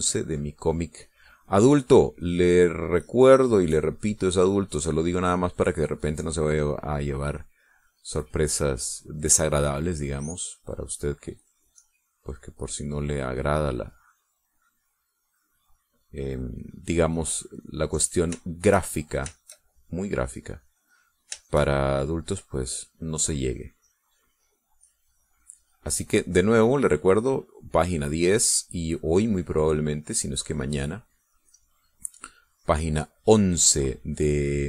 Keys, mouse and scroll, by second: 2.2-9.8 drag, 10.4-17.1 drag, 18.1 click, 19.1 shift+click, 20.5-22.4 shift+drag, 23.0-32.0 drag, 32.5-34.6 drag.